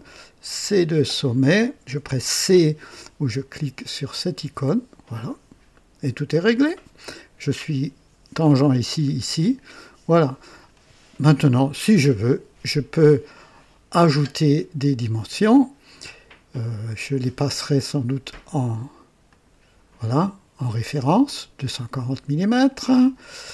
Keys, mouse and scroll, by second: 0.1-1.0 drag, 4.2 c, 9.0 scroll down 2, 9.6-10.3 right drag, 17.4 click, 19.1 click, 20.5 click.